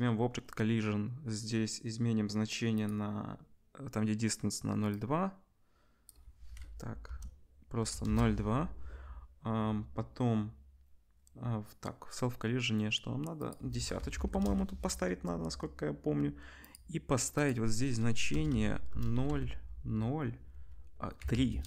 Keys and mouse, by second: 18.5 BackSpace.